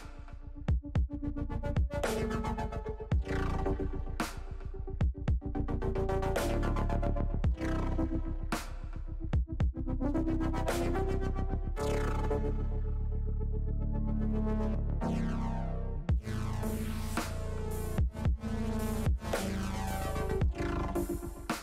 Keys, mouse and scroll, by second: 8.9 middle click, 9.7 middle click, 10.2 middle click, 10.8 shift+middle click, 11.7 KP_1, 12.9 middle click, 20.5 Tab.